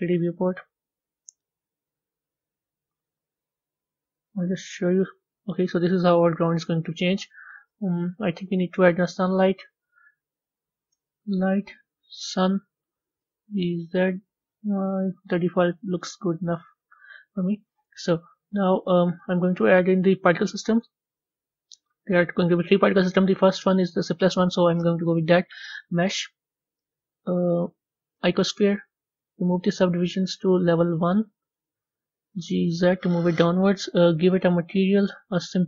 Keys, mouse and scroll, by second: 4.3 z, 5.0-12.1 middle drag, 13.2 g, 14.8-16.3 middle drag, 16.3-18.2 drag, 18.2 z, 19.5-21.8 middle drag, 21.8 a, 30.9-32.3 drag, 32.3 g, 34.2 click.